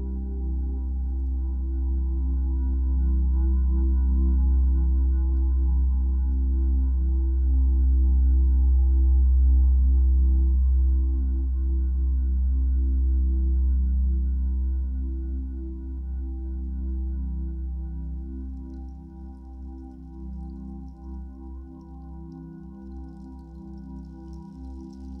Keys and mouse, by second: 0.8-3.4 drag, 3.5 g, 3.8 z, 4.6 click, 5.1-5.5 typing, 5.4 click, 7.1 click, 8.2-12.1 ctrl+alt+drag, 8.2 typing, 12.1-14.7 typing, 17.9-25.2 drag.